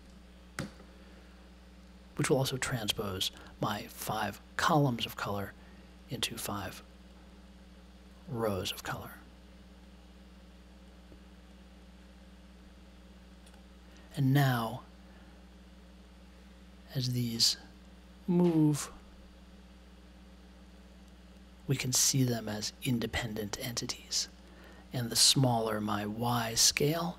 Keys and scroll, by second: 0.5 super+j.